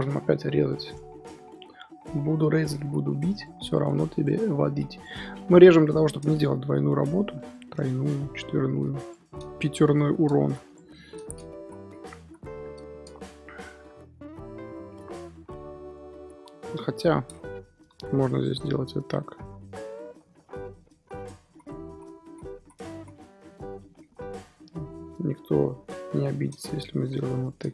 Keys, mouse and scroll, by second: 0.3 KP_1, 0.9 scroll down 2, 2.5 1, 2.8 z, 3.3 click, 3.7 click, 4.6 x, 5.2 scroll down 2, 5.6 KP_7, 5.9-6.3 scroll up 1, 6.4 click, 7.8 shift+middle click, 8.6 shift+click, 9.3 scroll up 3, 9.8 shift+click, 10.4 x, 10.9 shift+middle click, 11.5 z, 12.2 3, 12.8 shift+middle click, 13.0-13.9 scroll up 1, 13.9-15.4 scroll down 1, 15.4 ctrl+r, 16.3 ctrl+z, 16.5 ctrl+z, 17.1 scroll down 2, 17.7 scroll up 1, 17.8 2, 18.3 alt+click, 20.0 scroll down 3, 20.2 middle click, 20.9 ctrl+z, 21.4 ctrl+z, 21.8 ctrl+z, 22.2 ctrl+z, 22.5 ctrl+z, 22.9 ctrl+z, 23.4 middle click, 24.0-24.3 scroll up 2, 24.3 2, 24.7 alt+click, 24.9-26.0 middle drag, 26.0 KP_7, 26.4-27.3 scroll up 2, 27.3 alt+shift+click.